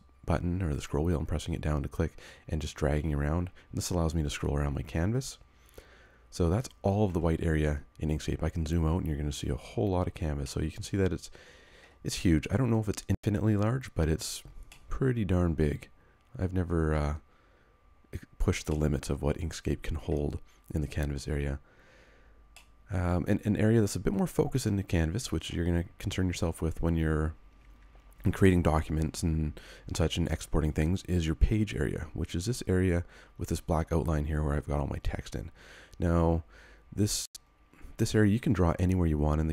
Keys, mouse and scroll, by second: 8.1-8.4 scroll down 1, 10.4 middle click, 12.0-13.3 scroll down 1, 13.4 scroll up 1, 14.8 middle click, 17.4 scroll up 1, 18.7 middle click, 20.6 scroll up 1, 22.5 middle click.